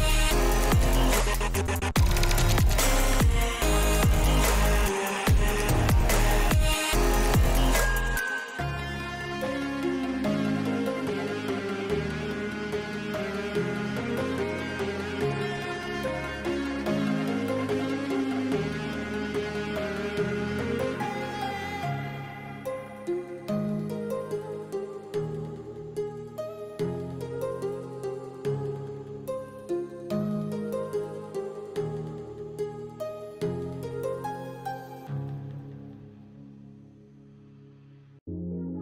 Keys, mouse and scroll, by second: 2.4 a, 3.4 s, 6.0 shift+middle click, 6.3 shift+middle click, 7.1 shift+middle click, 8.1 middle click, 9.0 shift+middle click, 9.6 n, 10.1 middle click, 10.4 shift+middle click, 10.7 Tab, 11.9 shift+middle click, 12.7 shift+middle click, 13.8-16.1 drag, 17.4-18.4 drag, 20.5 middle click, 21.4 shift+middle click, 22.9 g, 24.3 shift+middle click, 25.6 g, 30.4 KP_0, 31.3 shift+middle click, 32.4 click, 34.3 shift+middle drag, 34.9 shift+middle click, 35.9 shift+middle drag, 36.9 click.